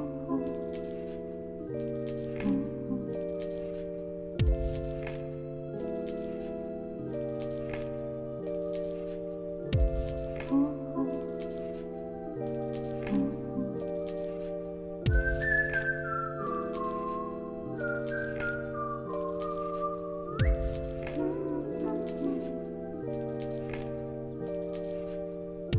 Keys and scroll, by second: 0.9 alt+z, 1.6 alt+x, 2.4 alt+z, 3.6 alt+x, 5.7 alt+z, 6.4 alt+x, 7.2 ctrl+s, 11.2 Delete, 13.0 t, 18.4 ctrl+s, 22.0 u, 23.2 alt+x.